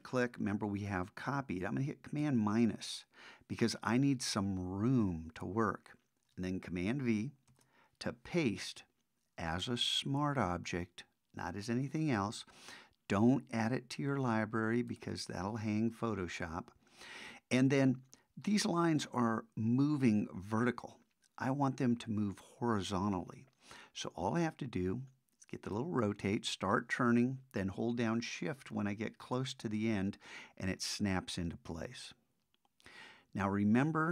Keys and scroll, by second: 2.2 super+-, 7.5 super+v.